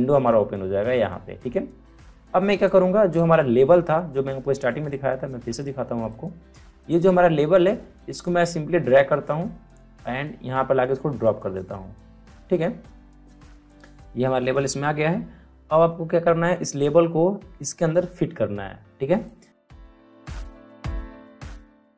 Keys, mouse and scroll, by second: 6.0-13.7 drag, 19.1 click, 19.6 Return, 19.9 ctrl+t, 20.0 click, 20.5-21.9 drag.